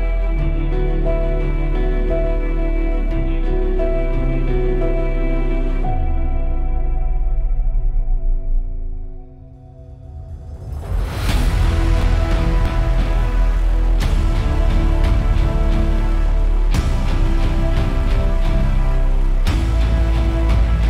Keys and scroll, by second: 8.4 super+=.